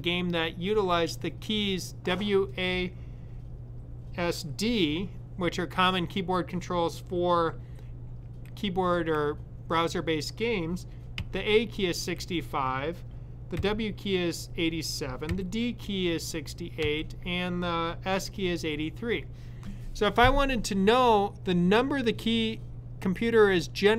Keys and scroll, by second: 11.0 typing, 14.9-15.6 typing, 16.6 typing.